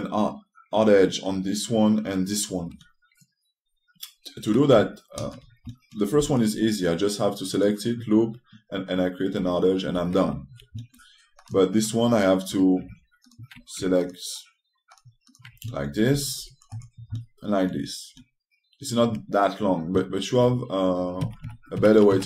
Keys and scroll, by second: 6.9 t, 10.5 6, 16.8 t.